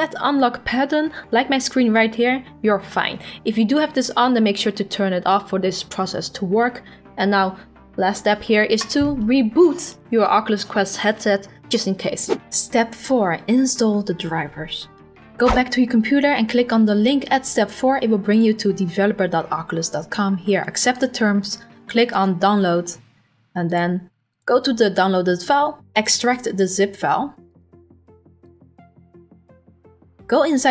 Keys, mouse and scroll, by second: 17.3 click, 21.0 click, 22.2 click, 23.7 click, 24.4 click, 26.0 right click, 27.6 click, 28.6 click, 30.5 click, 30.6 click.